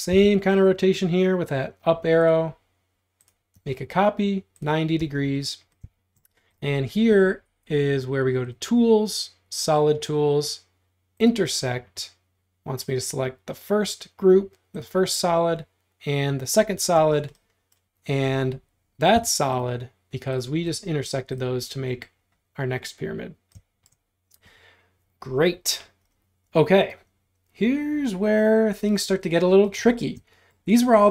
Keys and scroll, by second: 0.1 Up, 5.0 space, 17.0 space, 19.2 m, 20.5 space.